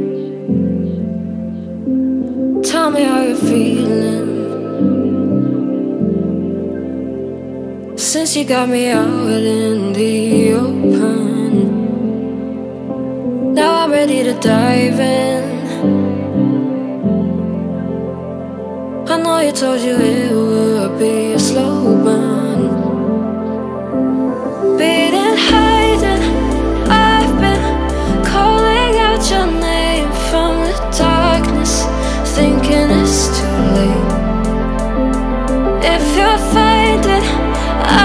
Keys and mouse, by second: 0.3 middle click, 3.9 middle click, 5.1 shift+z, 5.5 middle click, 6.9 /, 7.4 middle click, 8.2 KP_1, 8.8 3, 9.3 click, 9.5-11.0 drag, 11.4 shift+middle click, 12.0 ctrl+middle click, 12.3 shift+middle click, 12.6 ctrl+middle click, 12.9 middle click, 14.0 ctrl+middle click, 14.8-16.9 ctrl+KP_Add, 17.5 middle click, 18.3 shift+z, 18.8 shift+z, 20.0 click, 20.9 /, 21.4 Tab, 21.6 middle click, 22.6-23.3 middle drag, 23.5 shift+middle drag, 25.1 ctrl+middle click, 25.6 middle click, 26.3 middle click, 27.8 ctrl+middle drag, 28.1 shift+middle drag, 28.5 ctrl+middle click, 28.9 shift+a, 34.9 middle click, 35.5 r, 35.7 x, 37.6 9.